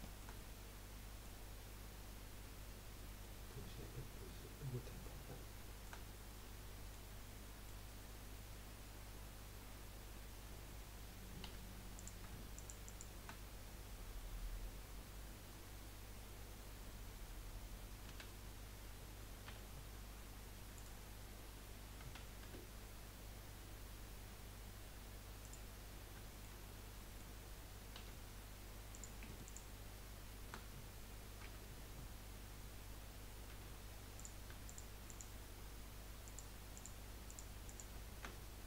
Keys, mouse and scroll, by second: 2.1-2.8 scroll down 2, 3.2-5.3 middle drag, 5.3-5.6 scroll up 1, 5.6 shift+middle click, 6.0 scroll up 2, 6.3-9.7 middle drag, 9.7-10.1 scroll down 2, 10.1-10.8 scroll up 1, 11.4 3, 11.9 click, 12.5 alt+shift+click, 12.8 alt+shift+click, 18.1 s, 22.4 s, 25.8-26.2 scroll up 1, 26.2-28.0 shift+middle drag, 28.0 1, 28.9 click, 31.4 j, 33.5 2, 34.2 click, 34.6 shift+click, 35.1 shift+click, 36.2 shift+click, 36.7 shift+click, 37.2 shift+click, 37.6 shift+click.